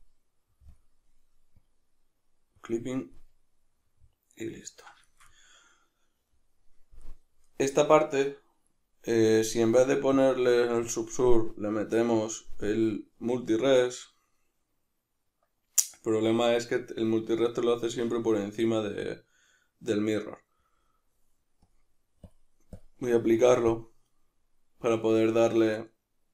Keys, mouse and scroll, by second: 3.1-10.1 middle drag, 10.1-13.7 drag, 13.7-21.7 middle drag, 21.7-26.3 drag.